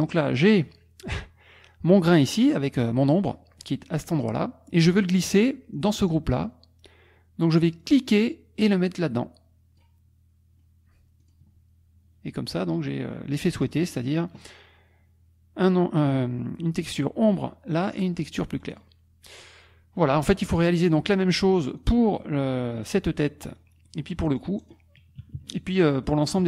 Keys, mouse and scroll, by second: 0.3 click, 6.4 click, 7.8-10.0 drag, 11.2 click, 13.3 click, 13.7-14.2 drag, 14.2-18.4 middle drag, 18.4-18.8 scroll down 1, 18.8 click, 21.0 click, 21.5 middle click, 21.9 click, 23.2 click, 23.8 middle click, 23.9-24.3 drag, 24.4-24.9 drag, 25.2 -, 26.0 click.